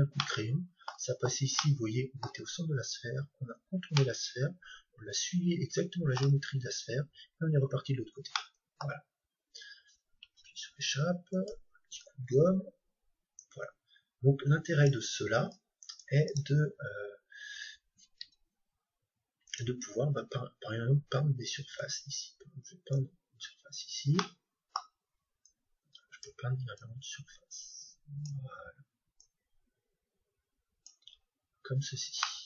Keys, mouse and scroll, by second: 0.2-3.5 middle drag, 4.0-5.9 middle drag, 6.5-7.8 scroll down 1, 7.8-8.4 scroll down 1, 8.4-10.2 middle drag, 11.4-13.2 drag, 19.5-21.4 drag, 20.2-23.0 middle drag, 24.2-26.1 middle drag, 31.3-32.1 scroll down 1, 32.1-32.4 middle drag.